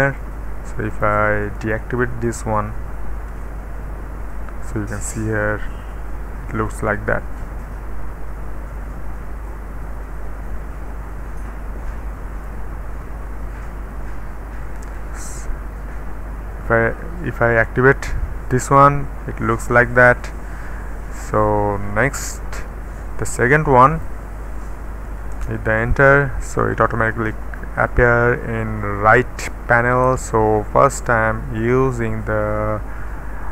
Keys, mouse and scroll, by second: 0.0 click, 0.9 click, 1.6 click, 3.3 d, 5.9-7.0 scroll down 1, 8.1-9.5 middle drag, 9.5-12.5 drag, 12.8-14.7 middle drag, 14.8 click, 15.2 d, 17.5-19.4 middle drag, 19.1-21.2 scroll down 1, 19.1 typing, 21.2 click, 21.2 typing, 23.4 click, 23.4-24.1 typing, 24.5 click, 25.3 Return, 31.1 click.